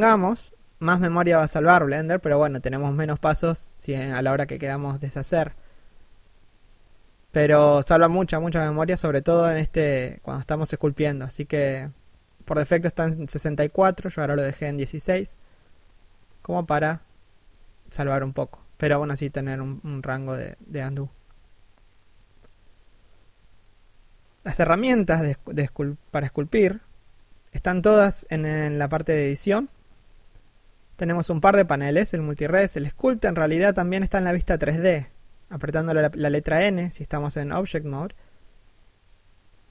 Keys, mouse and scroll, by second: 12.8-13.5 scroll up 1, 14.0 click, 16.4 middle click, 17.8 1.